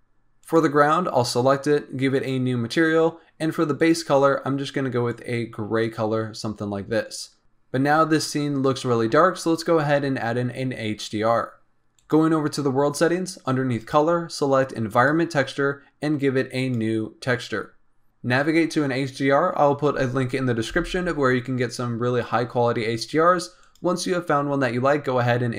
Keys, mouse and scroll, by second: 0.3 click, 2.1-3.8 drag, 11.9 click, 13.7-17.8 drag, 18.0 click.